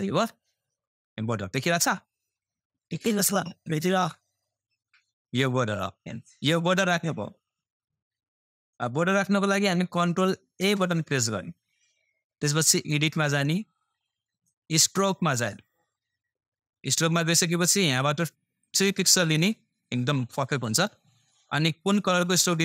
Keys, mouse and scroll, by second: 11.2 ctrl+a, 13.9-22.6 drag.